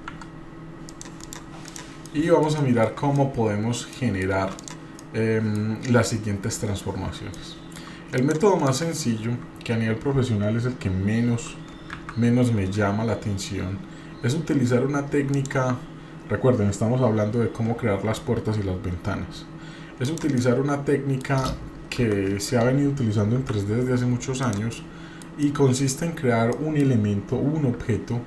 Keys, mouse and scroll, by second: 1.2 drag, 1.6 click, 2.1-2.4 shift+middle drag, 2.5-2.9 shift+middle drag, 2.9 shift+scroll down 2, 3.1 middle click, 3.9 middle click, 4.6 click, 5.1-5.7 middle drag, 7.3-7.7 shift+middle drag, 8.1 click, 8.6 drag, 11.9 shift+a, 17.7 s, 20.4 middle click, 21.9 KP_1, 23.4 g, 24.8 middle click, 25.4-25.9 middle drag, 26.5 middle click, 27.8 s.